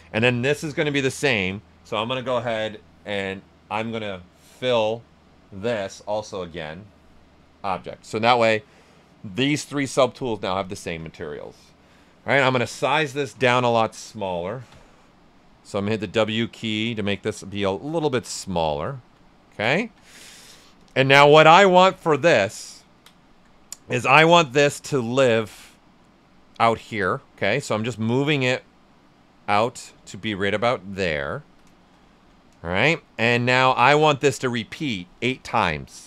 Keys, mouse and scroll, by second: 0.9 shift+f, 4.5 shift+q, 6.5 shift+click, 13.3 shift+w, 15.6-18.4 shift+drag, 18.4 shift+right click, 19.7 ctrl+alt+right click, 20.7 ctrl+click, 22.5 ctrl+right click, 24.4-27.5 drag, 27.5 right click, 28.3-31.3 drag, 31.3 ctrl+right click, 33.4 q, 33.7 ctrl+right click.